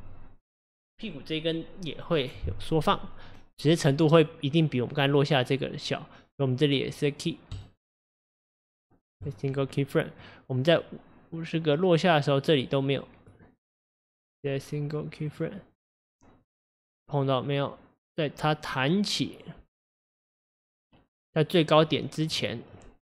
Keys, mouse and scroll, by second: 9.3-10.2 right drag, 10.2 click, 15.4-16.5 right drag, 16.5 click, 22.7 click.